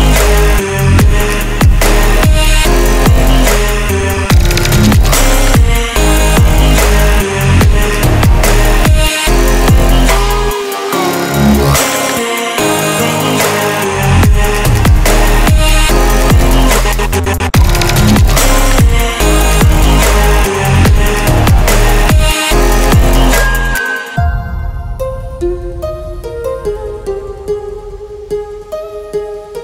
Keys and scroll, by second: 6.5 ctrl+z, 8.4 ctrl+z, 16.2 ctrl+z, 16.6 ctrl+z.